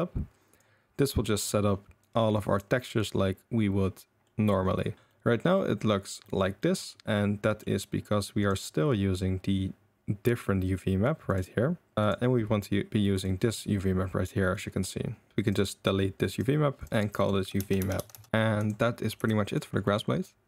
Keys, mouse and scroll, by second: 0.5 click, 1.3 click, 2.1-2.7 drag, 3.0 click, 4.2 middle click, 5.1 middle click, 5.5 middle drag, 6.2 middle drag, 6.6 middle drag, 7.1 middle drag, 7.4 click, 8.4 click, 12.0-12.9 drag, 13.1 click, 14.5-15.3 middle drag, 16.3 click, 16.9-18.3 drag, 17.8 BackSpace, 18.1 BackSpace, 18.3 ctrl+s, 18.6 click, 19.2 g, 19.8 drag.